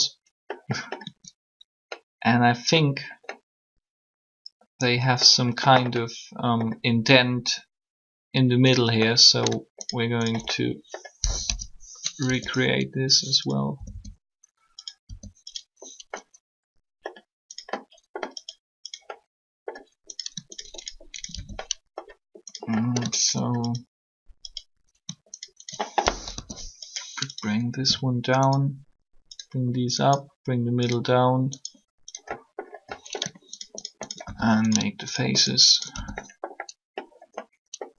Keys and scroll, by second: 11.2 shift+3, 12.2 e, 13.7 typing, 15.0 r, 26.0 shift+3.